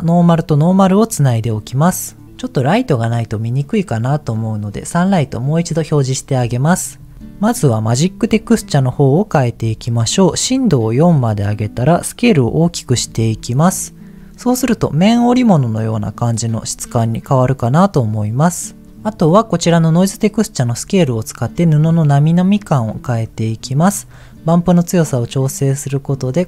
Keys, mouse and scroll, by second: 0.1 click, 4.9 click, 6.5-7.1 scroll up 3, 8.8 middle click, 9.1 scroll up 2, 10.4 click, 10.6 click, 12.3-13.7 drag, 14.1 scroll down 1, 14.4-14.7 scroll down 1, 15.0-16.0 middle drag, 16.5-17.8 scroll up 3, 20.6-23.2 drag, 24.0-26.2 drag.